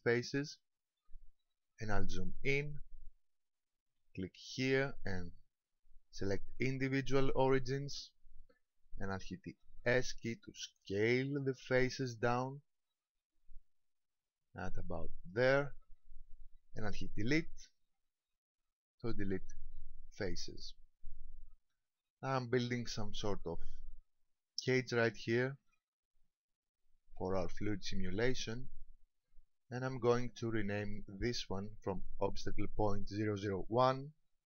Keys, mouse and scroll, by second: 0.4 shift+middle click, 1.3-2.3 scroll up 3, 4.4 click, 10.0 s, 15.6 click, 17.4 Delete, 21.4-23.5 scroll down 3, 25.1 shift+middle click, 25.8 middle click, 30.3 click, 34.0 ctrl+click.